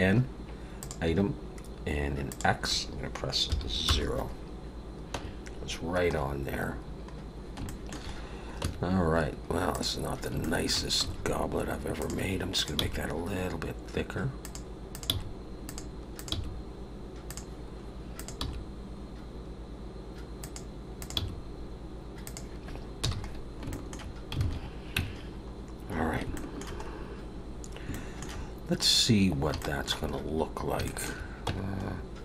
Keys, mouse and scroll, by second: 0.8 click, 2.2 click, 5.1 Tab, 5.6 scroll down 2, 7.6 shift+middle click, 8.1-8.6 scroll up 2, 8.6 Tab, 9.7 click, 10.1 scroll up 2, 10.4 shift+middle click, 11.0 g, 12.5 click, 12.7 g, 14.9 click, 15.0 g, 16.1 click, 16.3 g, 18.1 click, 18.4 g, 21.0 click, 21.1 g, 23.0 n, 23.3 scroll down 3, 23.7 shift+middle click, 24.4 alt+a, 24.9 Tab, 25.2-26.0 scroll down 3, 26.3 shift+middle click, 26.8 scroll up 3, 27.5 scroll down 3, 27.9 shift+middle click, 29.6 shift+middle click, 30.1-30.6 scroll up 2, 30.8 shift+middle click, 31.4 Tab, 31.9 scroll up 1.